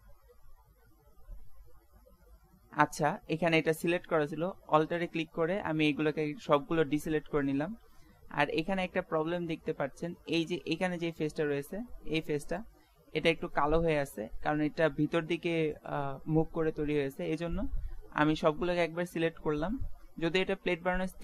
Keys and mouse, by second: 0.2 ctrl+z, 0.8 ctrl+z, 2.3-3.7 middle drag, 5.0 a, 7.0 a, 7.8 a, 11.0 middle click, 12.5 middle click, 12.9 click, 13.4 middle click, 14.3-16.8 drag, 17.3 middle click, 18.5 a, 18.9 a, 20.5 z, 20.9 z.